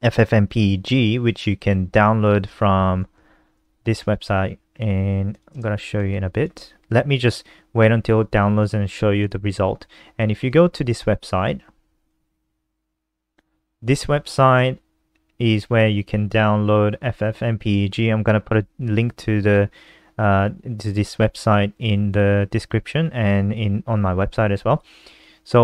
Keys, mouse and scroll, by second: 1.4-1.9 scroll down 2, 2.2-2.9 scroll down 1, 3.5-4.3 scroll down 3, 4.9 click, 5.8 shift+Home, 6.2 ctrl+c, 8.0 click, 11.6 ctrl+t, 11.9 ctrl+v, 13.2 Return, 14.7 click, 16.8-20.3 scroll down 13, 20.4 scroll down 1, 23.5 click.